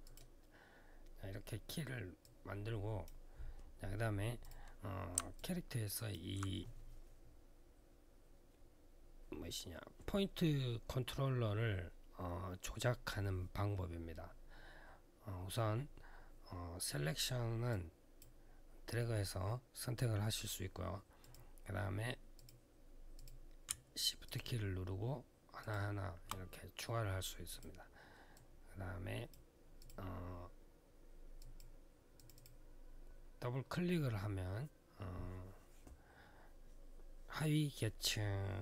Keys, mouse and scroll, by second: 2.0 click, 4.2 click, 4.2 click, 5.1 alt+click, 17.5 click, 21.0 click, 22.1 click, 22.9 click, 24.0 shift+click, 25.4 shift+click, 27.3 click, 28.1 click, 29.6 click, 29.6 click, 31.2 click, 31.9 click, 32.1 click, 32.2 double click.